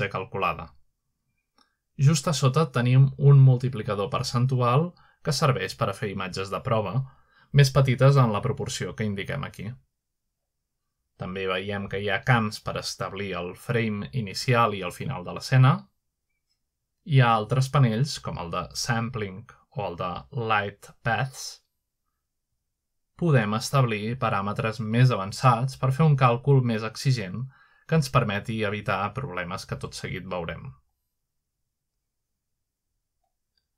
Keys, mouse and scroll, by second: 2.2 8, 2.8 0, 3.0 0, 3.5 Tab, 4.0-4.5 typing, 5.4 Tab, 5.6 typing, 9.0 7, 9.2 5, 9.6 Return, 13.8 click, 15.4 click, 16.6-18.3 typing, 17.4 Tab, 22.2 click, 25.1-26.4 drag, 26.4 1, 26.8 Return, 29.3-29.8 scroll down 2, 30.3-30.8 scroll up 2.